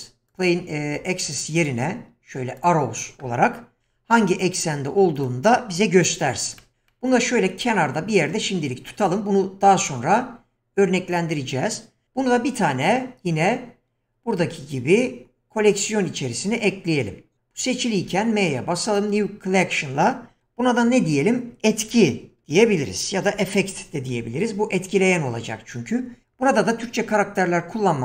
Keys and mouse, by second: 1.1 ctrl+z, 1.6 shift+a, 3.8 s, 18.0 m.